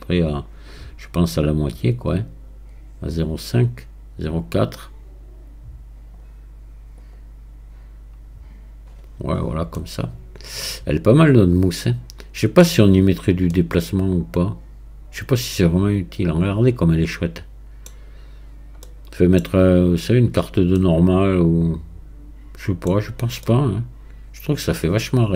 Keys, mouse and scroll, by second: 9.3-9.7 scroll down 1, 9.7-12.8 middle drag, 13.0-13.5 scroll up 1, 13.5-16.5 middle drag, 18.0-18.6 scroll down 5, 18.9-19.9 middle drag, 19.9 click, 20.8-22.9 middle drag, 22.9 scroll down 1, 23.5-25.3 middle drag.